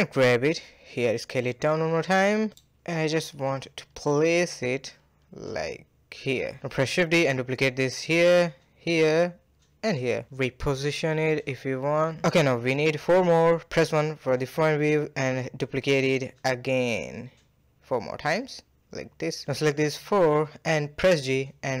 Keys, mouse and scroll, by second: 0.9 s, 2.3-2.7 middle drag, 2.7 g, 3.8-4.4 middle drag, 4.4 KP_1, 4.9 scroll up 1, 4.9 shift+middle drag, 5.2 g, 6.3 shift+d, 7.2 scroll down 1, 7.5 shift+middle drag, 7.8 scroll down 1, 7.9 shift+d, 8.9 shift+d, 10.5 click, 10.7 g, 12.0-12.8 middle drag, 12.8 KP_1, 13.4-13.8 scroll down 1, 13.8-14.1 shift+middle drag, 14.1-14.7 scroll up 3, 14.7 shift+middle drag, 15.0 shift+d, 15.8 shift+d, 17.2 shift+d, 18.6-19.8 middle drag, 19.8 shift+click, 20.5 shift+drag, 21.0 shift+drag, 21.4 g.